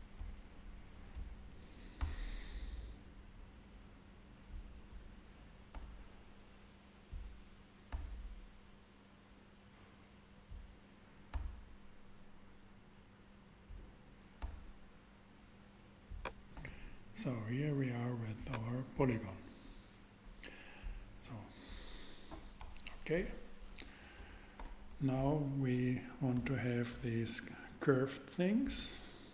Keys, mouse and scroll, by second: 0.3 shift+a, 2.0 shift+e, 4.6-5.9 drag, 5.7 e, 5.9 e, 7.9 e, 8.0 e, 11.3 e, 11.4 e, 14.4 e, 14.5 e, 16.5 e, 16.8 e, 20.4-21.9 middle drag, 24.6 KP_7, 24.6 shift+7.